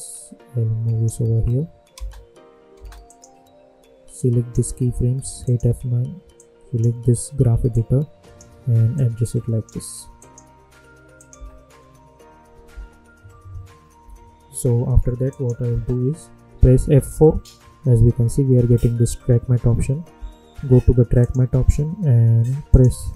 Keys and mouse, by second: 1.9 space, 3.0-8.9 drag, 8.9 click, 9.6 click, 11.5 space, 14.0 -, 15.2 click, 16.8 F4, 21.1 click.